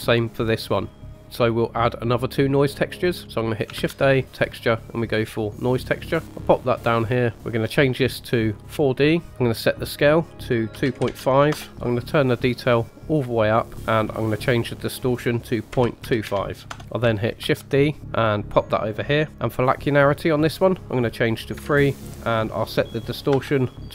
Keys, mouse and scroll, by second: 0.1 click, 0.4-1.0 drag, 1.2 scroll down 3, 2.5 middle click, 3.1-3.6 scroll up 2, 3.7 shift+a, 6.9-7.3 scroll up 2, 7.3 middle click, 7.6 ctrl+z, 7.6-8.7 drag, 9.3 ctrl+z, 9.4-11.5 drag, 12.6-16.7 drag, 17.3 shift+d, 20.3-23.9 drag.